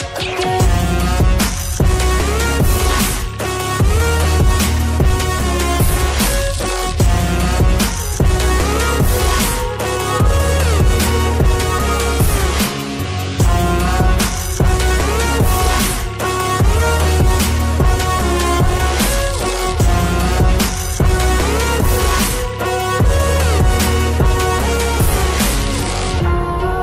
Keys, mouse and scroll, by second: 1.3 click, 4.4 double click, 5.5 click, 15.3 scroll down 1, 17.8 click, 24.0 ctrl+z, 25.0 click, 26.2 ctrl+z, 26.7 click.